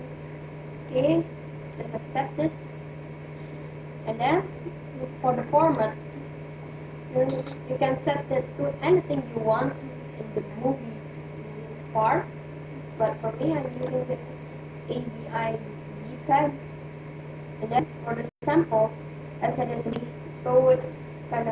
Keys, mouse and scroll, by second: 3.5-7.7 drag, 12.5-18.3 middle drag.